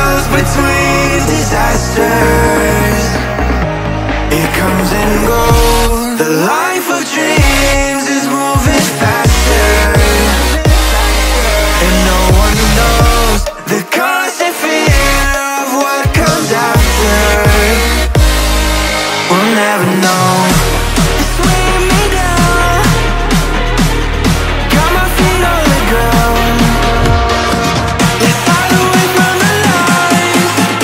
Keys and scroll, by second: 6.4 Tab, 6.7 ctrl+v, 12.0 ctrl+shift+[, 12.4 ctrl+], 12.8 ctrl+[.